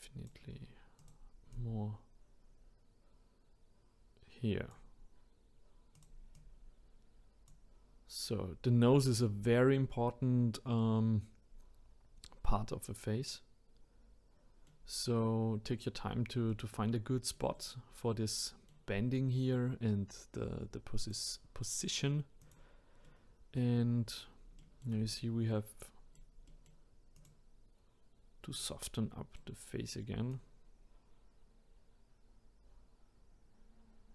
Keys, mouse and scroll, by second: 1.0 click, 1.5 click, 6.0 click, 7.8-8.2 scroll down 2, 10.0 scroll down 3, 10.8-13.8 middle drag, 16.5-20.5 middle drag, 21.0 click, 22.4 click, 23.0 middle click, 23.8-24.2 scroll up 2, 24.6-27.2 shift+middle drag, 27.2 click, 28.5-30.3 middle drag, 30.3 click.